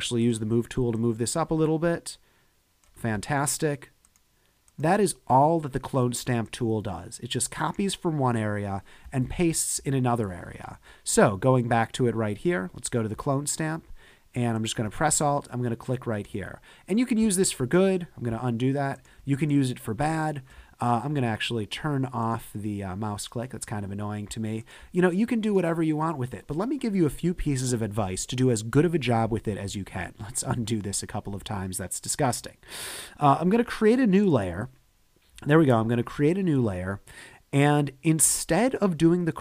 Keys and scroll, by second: 9.2 super+-, 9.8 super+-, 12.4 s, 17.4 super+z, 30.0 alt+super+z.